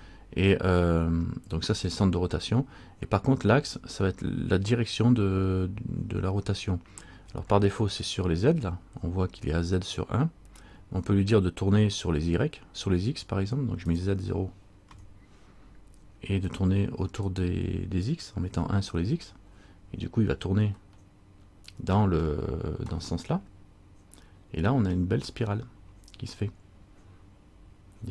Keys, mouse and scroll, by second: 1.3-3.1 scroll down 2, 14.0 click, 17.4 click, 21.1 middle click, 23.1 middle click.